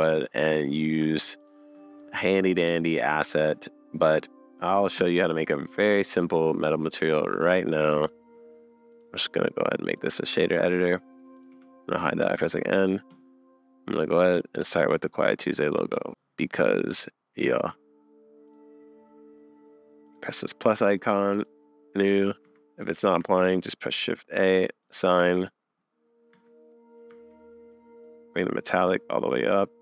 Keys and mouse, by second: 1.5-2.6 ctrl+middle drag, 3.8-7.5 middle drag, 8.1 middle click, 10.0-11.4 middle drag, 11.4 click, 11.5 n, 12.4 super+s, 15.9 click, 16.2 middle click, 18.5 click, 22.5 Tab, 23.2 a, 25.2 Tab, 26.3 Tab, 27.2 super+s.